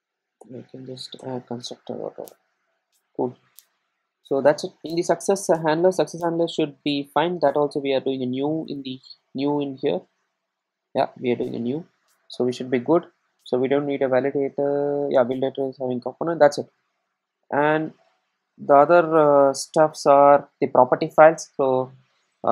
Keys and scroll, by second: 0.4 Return.